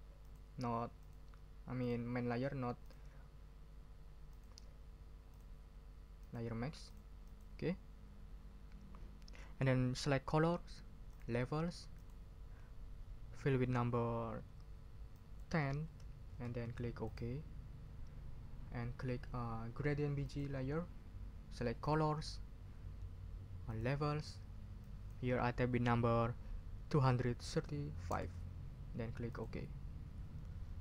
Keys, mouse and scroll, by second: 0.2 click, 1.0 click, 1.8 click, 2.8 click, 4.3 click, 5.3 click, 6.2 click, 6.9 click, 7.2 click, 11.1 click, 11.9 click, 15.1 click, 15.8 1, 16.3 0, 17.0 click, 20.2 click, 21.8 click, 23.7 click, 24.8 click, 27.1 2, 27.5 3, 28.1 5, 29.3 click.